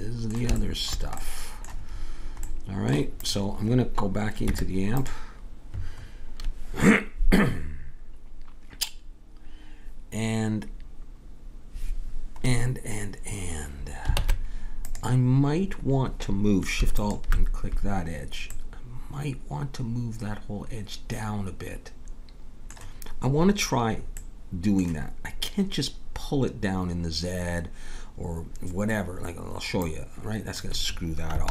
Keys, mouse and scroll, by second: 3.2-5.1 right drag, 4.5 Tab, 14.2 ctrl+Tab, 16.9-17.9 drag, 17.9-20.3 middle drag, 29.8-31.5 drag.